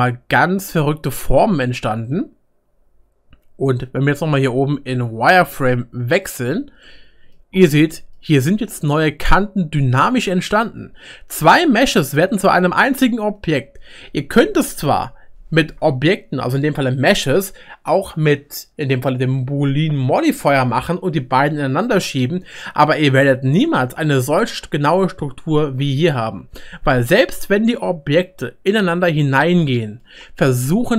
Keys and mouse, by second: 5.5-7.1 middle drag, 6.2 click, 7.4-10.9 middle drag, 11.5-12.7 shift+middle drag, 28.2-30.5 middle drag, 30.1-30.9 right drag.